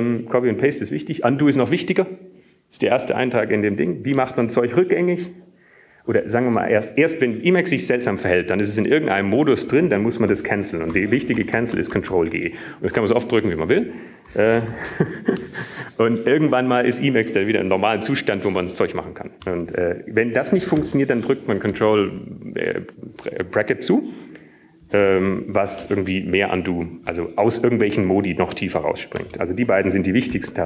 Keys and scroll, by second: 11.4 Up, 13.6 ctrl+g, 14.0 ctrl+g, 15.0 ctrl+g, 23.8 ctrl+], 28.4 ctrl+].